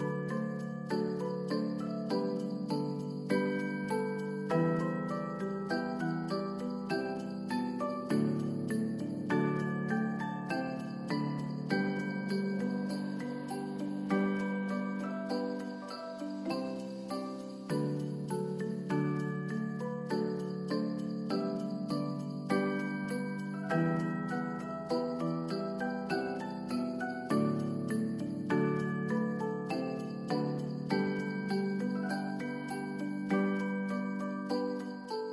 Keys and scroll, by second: 2.7 ctrl+s, 19.9 space, 24.2 space, 28.8 ctrl+s, 29.5 space, 32.2 m, 34.5 u.